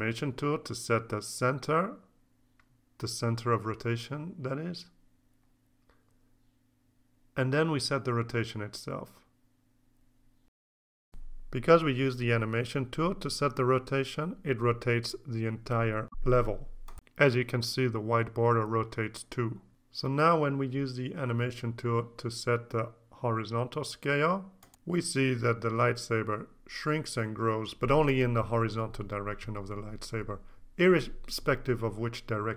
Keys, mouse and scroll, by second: 0.4-1.0 scroll up 1, 2.3-5.0 drag, 5.2-5.7 scroll down 1, 6.9 click, 8.5 click, 9.5-13.6 drag, 16.4 click, 18.4 click, 20.7 click, 23.1 KP_5, 23.1 KP_0, 24.0 KP_Enter, 26.3 ctrl+z.